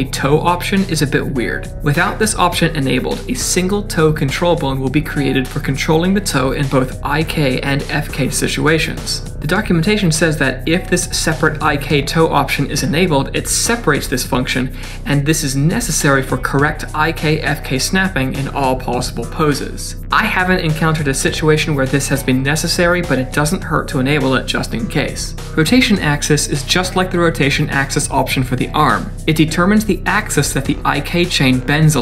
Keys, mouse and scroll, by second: 29.8 click, 30.1 click.